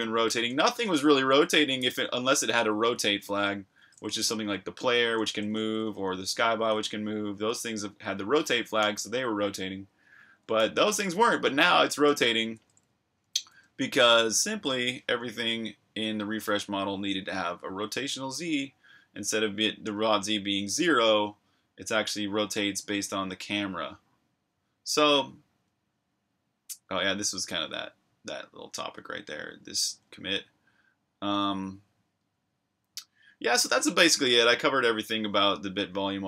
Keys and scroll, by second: 0.0-6.1 typing, 7.3-8.8 typing, 9.9-11.5 typing, 12.5 super+q, 13.5 super+Tab.